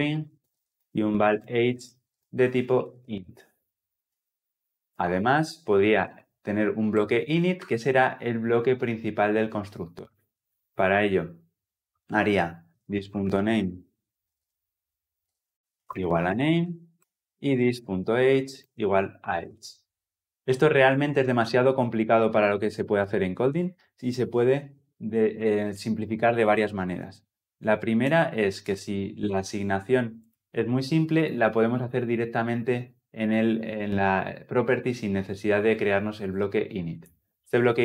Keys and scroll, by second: 0.6 Return, 15.6 Return.